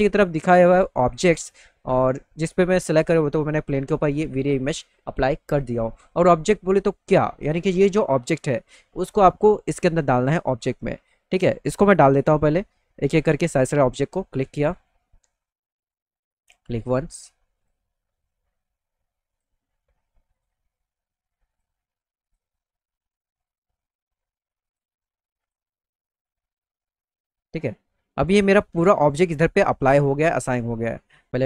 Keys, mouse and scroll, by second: 6.2 middle click, 6.7 middle click, 7.0 middle click, 12.0 click, 13.5 click, 14.6 click, 16.4 click, 17.6 click, 19.3 click, 20.3 click, 21.5 click, 22.2 click, 23.5 click, 24.7 click, 25.4 click, 26.9 alt+middle click, 31.1 click.